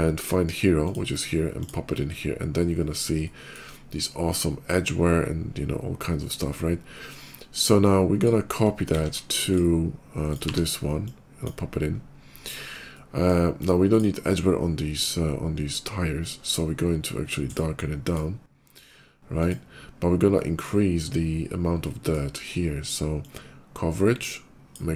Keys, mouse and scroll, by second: 0.1 shift+a, 2.1-2.6 scroll up 3, 3.1 shift+middle click, 5.0 shift+middle click, 6.3 scroll down 1, 7.2 middle click, 8.0 click, 8.7 ctrl+c, 9.3 click, 10.0 click, 10.3 ctrl+v, 10.7 click, 11.8 scroll up 2, 12.8 middle click, 13.7 click, 16.3-17.4 drag, 17.7 click, 19.1 click, 20.1 middle click, 20.8 scroll up 2, 21.6 middle click, 22.9-24.6 drag.